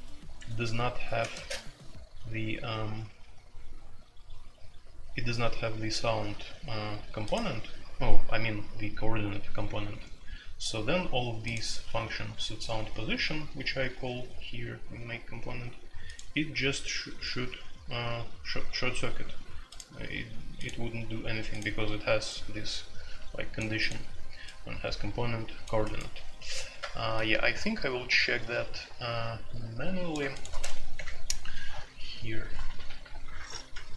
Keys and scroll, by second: 0.3 Escape, 1.2 space, 1.3 Tab, 30.6 a, 30.9 Return.